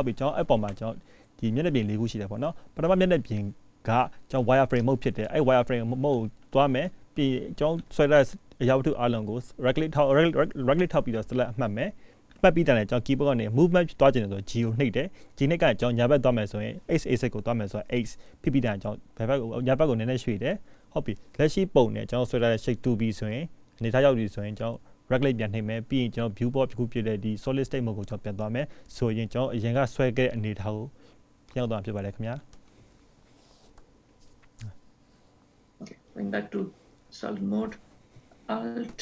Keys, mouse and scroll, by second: 4.9 click, 5.6 click, 7.8 g, 22.6 click, 35.9 click.